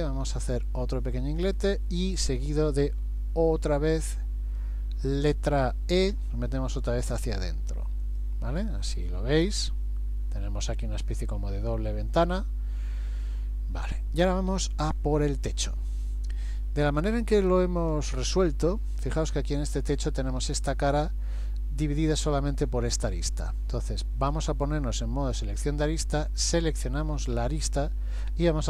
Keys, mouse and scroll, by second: 2.0 middle click, 6.2 e, 8.6-9.1 scroll up 2, 9.1 middle click, 11.8 scroll down 2, 12.5 middle click, 14.7 shift+middle click, 17.0 click, 24.5 click, 26.4 click, 27.7 scroll down 1.